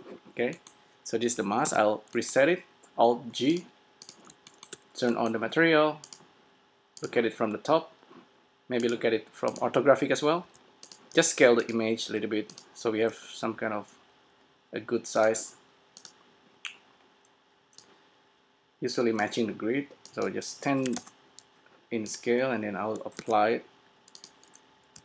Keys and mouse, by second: 1.7 alt+g, 4.5 middle click, 4.8 middle click, 5.3 middle click, 7.1 click, 10.0 click, 10.5 s, 11.3 s, 11.9-14.3 drag, 12.2 s, 13.0 s, 15.4-19.8 drag, 20.2-22.0 drag, 22.2-23.8 drag, 23.4 ctrl+a.